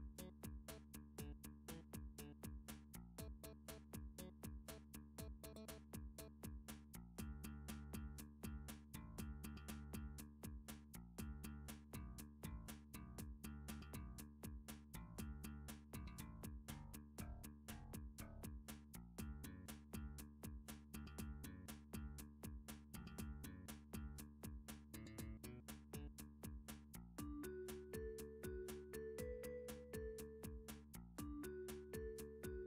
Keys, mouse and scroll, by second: 0.0 click, 0.3 click, 0.9 click, 4.2 click, 6.5 g, 7.9 click, 8.6 alt+click, 11.4-12.6 scroll, 12.6 g, 13.5 click, 13.8 3, 14.7 r, 16.2 ctrl+click, 16.9 middle click, 17.8 s, 19.6 x, 20.4 click, 21.4 3, 22.1 scroll, 22.6 shift+middle click, 22.8 scroll, 23.3 shift+middle click, 23.8 s, 25.6 click, 26.2 g, 29.0 click, 29.4 middle click, 29.6 middle click, 29.6 middle click, 30.1 shift+middle click, 30.8 d, 32.3 click.